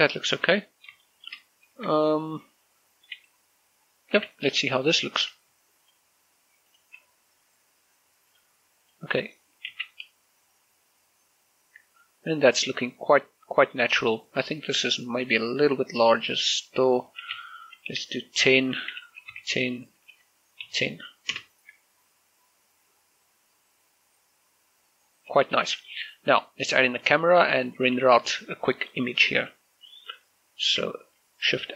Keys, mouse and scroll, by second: 0.2 shift+middle click, 1.1 shift+middle click, 2.0-4.2 middle drag, 4.2 z, 5.9 shift+click, 8.4 click, 9.8 shift+z, 14.9 click, 17.3-20.7 typing, 17.6 Tab, 19.9 Tab, 21.4 Return, 25.7 z, 27.1 middle click, 27.7 scroll down 1, 28.4 shift+middle click, 28.6-30.8 middle drag, 30.8 shift+a.